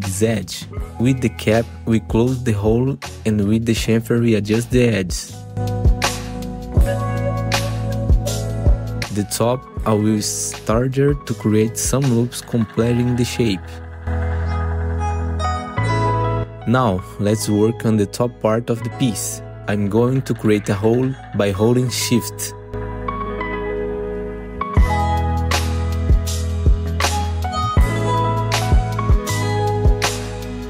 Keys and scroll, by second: 1.3 F4, 3.3 F3, 5.4 F3, 6.1 F3, 7.2 ctrl+shift+c, 10.7 4, 11.2 r, 13.3 F3, 13.9 2, 15.0 2, 15.3 w, 16.5 F4, 18.7 4, 27.9 r.